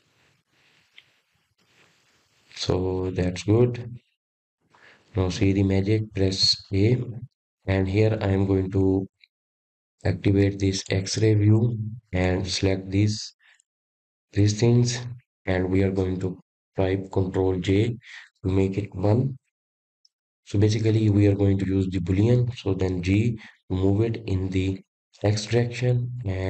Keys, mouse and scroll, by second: 3.5-4.7 middle drag, 4.7 click, 5.3-10.8 middle drag, 10.8 Tab, 11.5-12.6 middle drag, 12.6 click, 13.8 click, 15.1-15.8 drag, 15.8-16.6 middle drag, 16.6 click, 18.1 shift+click, 18.5 shift+click, 19.0-21.9 middle drag, 21.9 ctrl+j.